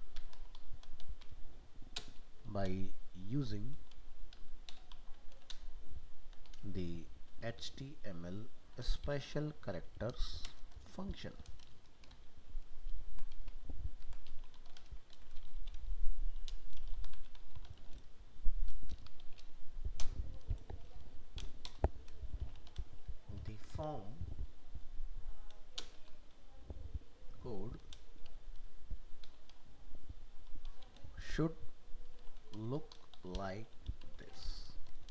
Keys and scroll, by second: 12.1 ctrl+shift+Left, 12.9 ctrl+shift+Right, 14.0 ctrl+x, 15.1 ctrl+v.